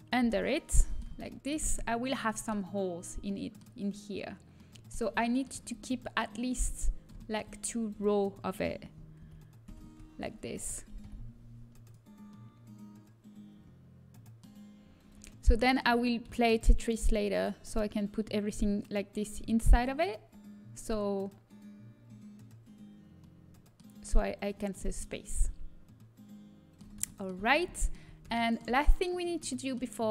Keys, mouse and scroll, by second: 0.1 click, 9.1 ctrl+KP_Subtract, 9.6 ctrl+KP_Subtract, 12.1 Delete, 23.1-24.5 middle drag.